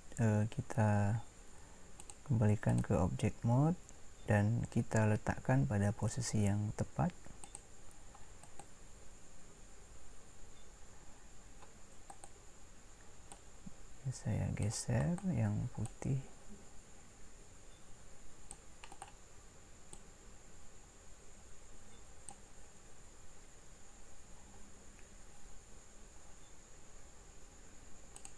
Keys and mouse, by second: 20.0 click.